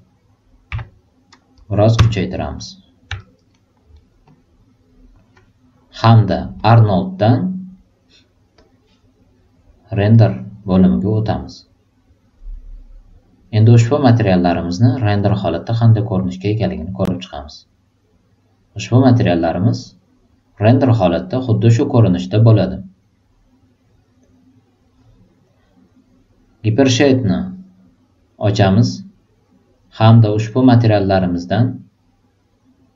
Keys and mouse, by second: 1.9 Return, 3.1 alt+right drag, 3.5 alt+middle drag, 3.9 alt+right click, 4.2 alt+click, 6.6 click, 8.5 click, 10.1-11.6 drag, 14.0-15.7 drag, 16.7 click, 26.9 click, 30.3-32.9 drag.